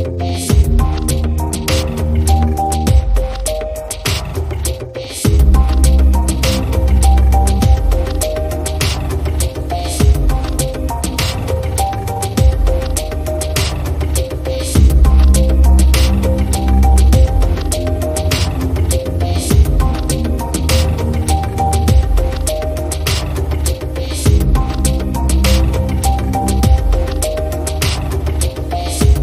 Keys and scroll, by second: 0.4 i, 5.7 super+[, 19.8 shift+Right, 22.8 shift+Right, 25.4 shift+Left, 26.9 super+c, 27.8 super+f, 28.4 shift+Left.